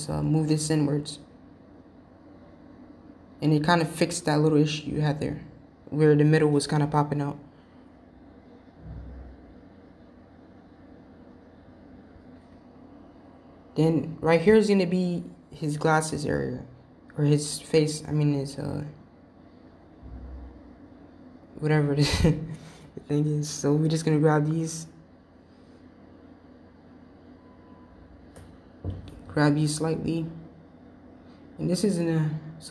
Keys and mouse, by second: 5.3 middle click, 6.5 middle click, 7.1 middle click, 17.1 click, 19.4 g, 23.2 click, 24.0 g, 26.5 click, 27.0 g.